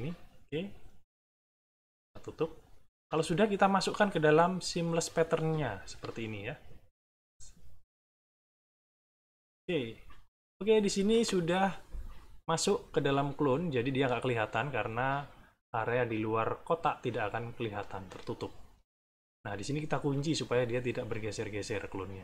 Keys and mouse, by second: 0.7 click, 1.2 click, 3.0 click, 5.6 shift+click, 6.6-9.2 drag, 13.4 middle click, 18.3 middle click, 20.1 click, 21.2 click.